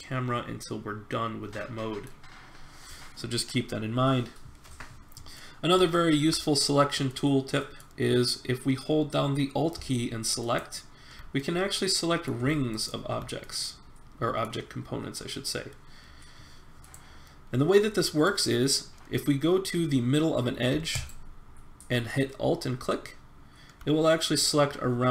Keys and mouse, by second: 5.0 middle click, 6.0-9.0 middle drag, 11.3-12.5 middle drag, 12.7 middle click, 13.4-14.6 middle drag, 17.0 click, 17.7 middle click, 17.7 click, 17.9 middle click, 17.9 click, 17.9 middle click, 18.0 right click, 18.1 click, 18.6 middle click, 20.9-22.9 drag.